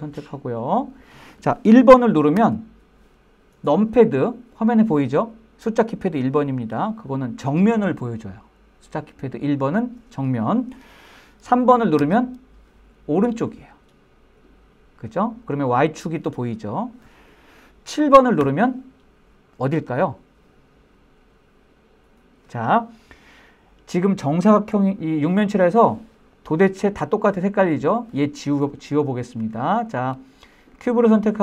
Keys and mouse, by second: 2.3 KP_1, 11.9 KP_3, 18.3 KP_7, 25.1-25.8 middle drag, 26.3-27.4 middle drag, 30.0 click.